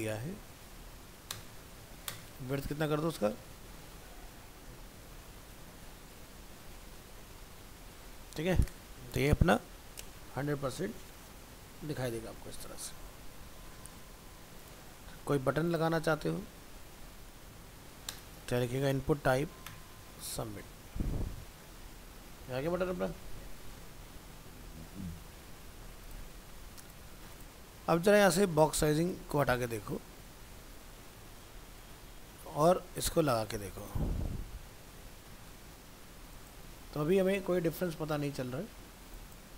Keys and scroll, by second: 3.9 ctrl+s, 4.4 alt+Tab, 17.3 ctrl+c, 17.5 ctrl+End, 17.7 ctrl+v, 20.6 alt+Tab, 29.4 ctrl+x, 30.3 alt+Tab, 33.5 ctrl+v, 34.3 alt+Tab.